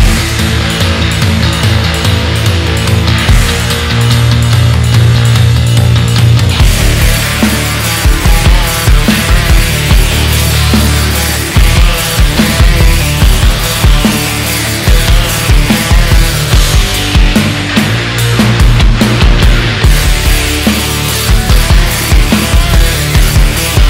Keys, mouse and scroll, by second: 0.9-1.3 scroll up 1, 1.3 Tab, 1.6-2.6 middle drag, 2.6 ctrl+r, 6.3 middle click, 6.8 KP_1, 7.3-7.8 scroll down 2, 7.8 Tab, 8.4 click, 8.8-11.0 middle drag, 11.0 KP_1, 11.3 scroll down 1, 11.6-12.5 shift+middle drag, 12.5 scroll up 2, 12.8 Tab, 13.0-14.4 middle drag, 14.4 alt+click, 15.1 click, 17.3 shift+middle click, 18.1 KP_1, 18.5-19.8 scroll up 1, 19.8-21.3 shift+middle drag, 21.3 alt+z, 21.7 click, 22.7 click.